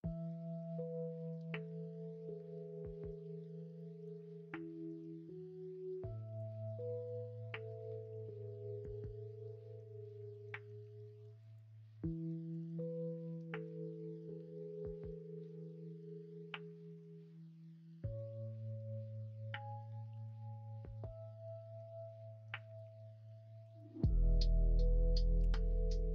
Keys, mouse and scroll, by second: 1.3-3.8 scroll down 1, 3.8 middle click, 4.0 scroll down 1, 10.4 ctrl+r, 12.6 ctrl+z, 20.1 ctrl+r, 25.4 g.